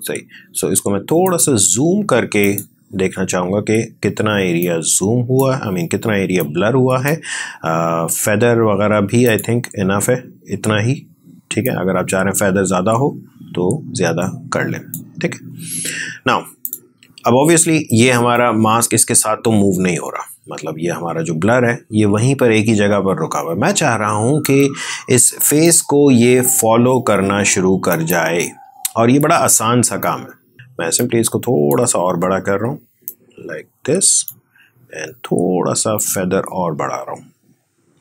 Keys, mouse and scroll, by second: 2.9-9.1 drag, 11.5-38.0 drag.